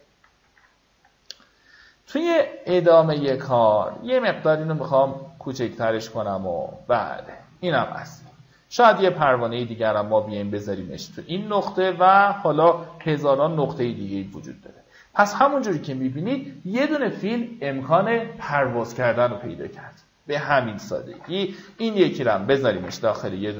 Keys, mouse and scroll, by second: 2.0 click, 2.5-2.9 alt+scroll down 1, 3.2 alt+click, 6.8 alt+scroll down 1, 7.5-8.0 alt+scroll down 2, 9.4-12.6 alt+drag, 13.6 alt+Delete, 14.8-15.7 alt+scroll up 2, 20.1 click, 21.7 ctrl+g, 22.5 click, 23.3 ctrl+g.